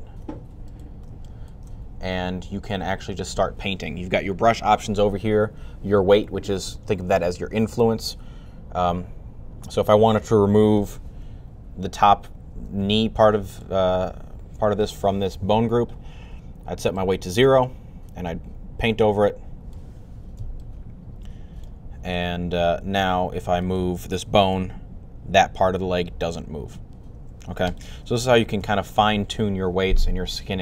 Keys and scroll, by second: 24.4 r, 27.9 super+z, 28.2 super+z, 28.4 super+z.